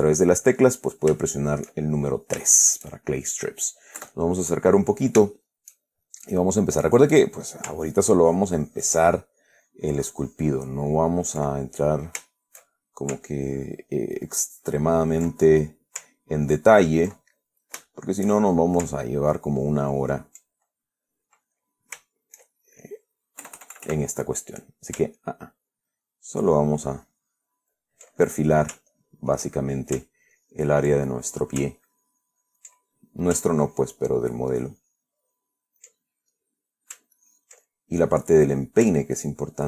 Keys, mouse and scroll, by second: 0.2-1.5 shift+drag, 1.6 shift+click, 2.2 shift+click, 2.2-2.7 shift+middle drag, 2.9-3.7 shift+middle drag, 4.3 KP_Add, 4.7-5.5 middle drag, 5.6-6.1 shift+middle drag, 7.5 click, 8.1 ctrl+click, 11.4 ctrl+click, 11.9-13.5 ctrl+middle drag, 13.9-15.7 ctrl+drag, 15.7-16.3 ctrl+middle drag, 16.7 ctrl+click, 17.5-19.2 ctrl+middle drag, 19.5 ctrl+click, 20.3 ctrl+click, 21.1-23.3 ctrl+middle drag, 23.7 KP_Add, 25.8-28.4 ctrl+drag, 28.5-29.0 ctrl+middle drag, 29.2-30.3 ctrl+drag, 30.7-31.9 ctrl+drag, 32.1-33.1 ctrl+drag, 33.1-33.6 ctrl+middle drag, 33.9 ctrl+click, 36.4 ctrl+middle click, 37.5-38.5 ctrl+drag, 39.5-39.6 ctrl+drag.